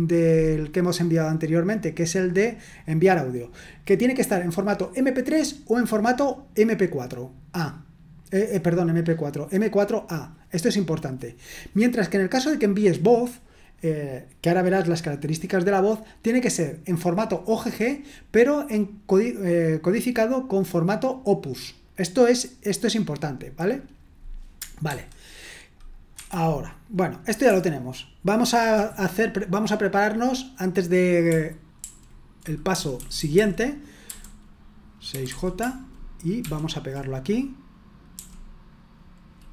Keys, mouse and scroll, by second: 2.4 click, 12.3 click, 24.9 super+1, 25.7 click, 26.1 Escape, 31.8 ctrl+u, 32.7-34.0 typing, 35.1 typing, 36.4 typing, 38.1 typing.